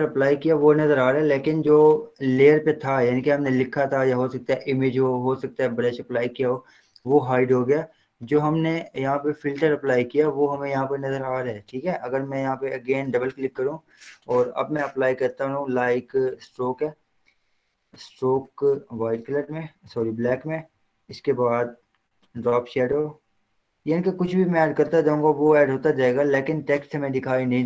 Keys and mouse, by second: 13.3 click, 16.6 click, 20.3 Return, 22.5 click, 25.4 click.